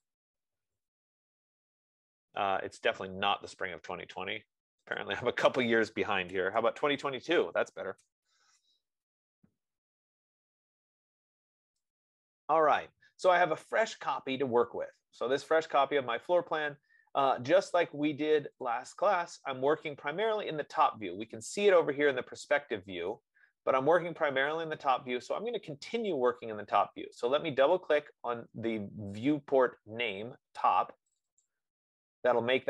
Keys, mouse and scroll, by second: 0.0-1.4 typing, 2.0-2.6 Return, 2.4-3.1 typing, 5.3 middle click, 6.5 Return, 6.8 typing, 7.7-8.7 middle drag, 8.0-8.7 typing, 8.5 Return, 18.9 click, 19.6 click, 23.5 right click, 28.2 click, 31.5 click, 32.2 click.